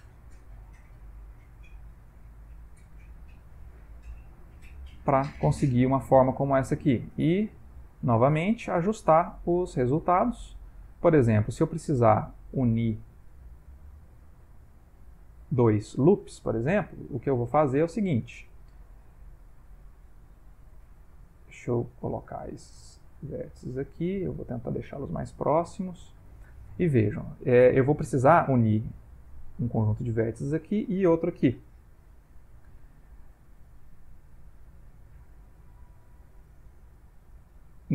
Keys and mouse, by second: 0.3 e, 1.9 e, 3.2 ctrl+middle click, 3.8 middle click, 4.2 ctrl+middle click, 5.3 click, 5.5 g, 6.5 click, 6.6 g, 7.5 click, 7.7 g, 8.5 g, 9.2 click, 9.3 g, 10.1 click, 10.3 g, 11.4 click, 11.6 g, 12.6 click, 12.7 g, 13.6 click, 13.7 g, 14.7 click, 14.8 g, 15.7 shift+middle click, 17.1 click, 17.3 g, 18.5 click, 18.6 g, 19.3 click, 19.6 g, 20.8 click, 20.9 g, 22.2 click, 22.7 g, 24.1 click, 24.2 g, 25.2 click, 25.5 g, 32.5 ctrl+middle click, 33.7 middle click, 35.3 ctrl+middle click, 36.3 click, 36.6 g.